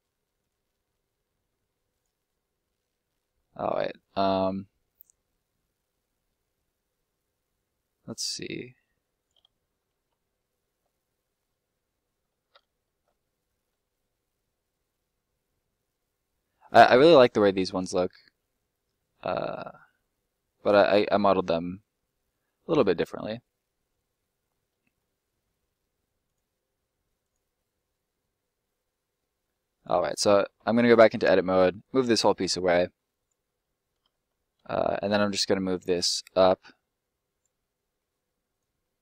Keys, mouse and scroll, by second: 2.6 middle click, 3.4 scroll up 1, 3.5 middle click, 8.2 scroll up 1, 9.1 right click, 10.4 alt+middle click, 12.2-12.6 shift+scroll up 2, 12.6 alt+middle click, 13.0 shift+middle click, 23.9 scroll down 1, 24.1 middle click, 24.2 shift+middle click, 26.2 click, 27.8 middle click, 29.7 right click, 31.8 click, 32.6 middle click, 33.1 right click, 34.0 ctrl+right click, 35.8 click, 37.5 middle click, 38.5 right click, 38.8 middle click.